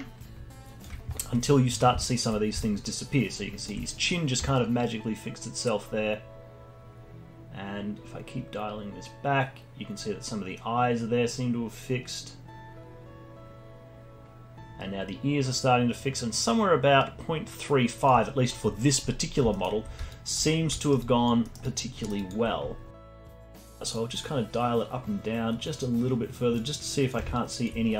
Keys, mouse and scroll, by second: 2.0-2.4 alt+drag, 2.4 scroll up 2, 2.6-7.8 alt+drag, 18.6-19.1 scroll down 1, 19.1-19.5 scroll down 6, 19.5 alt+middle click, 20.1 alt+click, 20.5 scroll up 3, 20.8 alt+middle click, 21.0 alt+click, 21.4 alt+middle click, 21.6 alt+click, 22.0 alt+middle click, 22.2 alt+click, 23.1 scroll up 1, 23.9-27.1 shift+drag, 27.3-27.9 alt+drag.